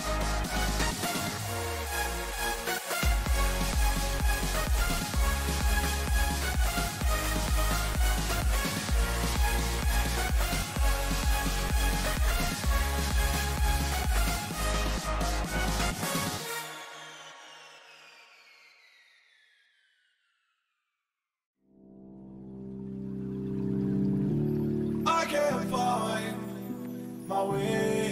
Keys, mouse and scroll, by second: 4.2-6.6 drag, 6.6-8.5 right drag, 8.3-10.3 drag, 13.6-15.4 right drag, 14.8-17.4 drag, 18.8-20.7 right drag, 19.9-25.5 drag, 21.6-23.7 right drag, 26.6-28.1 right drag, 27.6-28.1 middle drag.